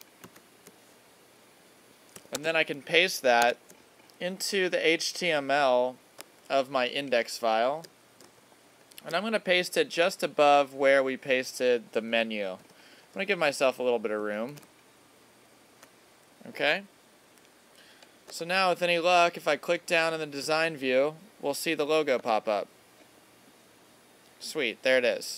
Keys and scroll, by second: 0.2 super+c, 2.3 super+Tab, 6.5 alt+super+=, 12.6 Return, 13.7 Up, 14.5 super+v, 18.5 alt+super+-.